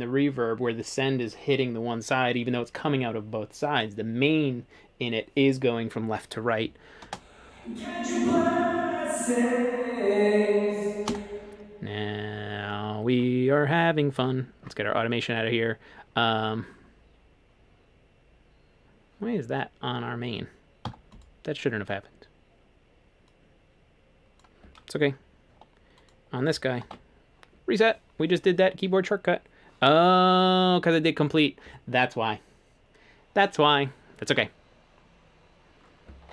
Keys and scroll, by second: 7.1 space, 11.1 space, 14.2 a, 20.9 1, 26.9 ctrl+r.